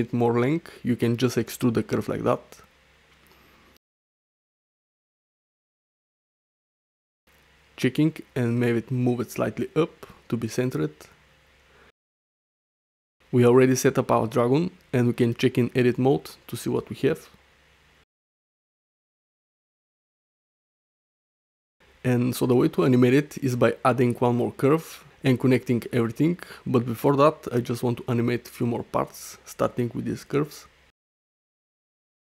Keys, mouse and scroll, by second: 0.0 middle click, 0.5 e, 2.7 e, 4.3 Tab, 4.3-4.9 drag, 4.9 g, 5.2 x, 5.6 alt+s, 6.7 alt+s, 7.0 Tab, 8.0-8.5 drag, 8.9 g, 8.9 z, 10.3-10.7 drag, 10.7 middle click, 11.2 shift+middle click, 11.6-12.3 middle drag, 12.5 shift+middle click, 12.7-13.0 middle drag, 15.3 click, 16.0 Tab, 16.5 click, 17.1 shift+click, 18.2 ctrl+t, 18.8 click, 19.2 g, 20.0 middle click, 21.0 ctrl+z, 21.2 ctrl+z, 21.7 ctrl+z, 22.3 Tab, 22.5 shift+middle click, 22.8 middle click, 23.4 middle click, 26.6 middle drag, 27.2 shift+middle click, 27.8-28.2 middle drag, 28.4 shift+middle drag, 29.7 drag, 30.7-31.1 middle drag, 31.5-31.9 shift+middle drag.